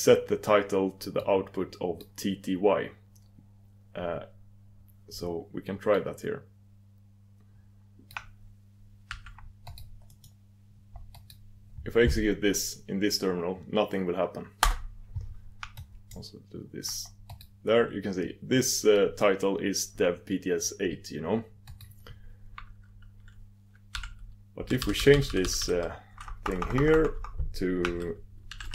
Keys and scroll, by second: 10.4 ctrl+super+Return.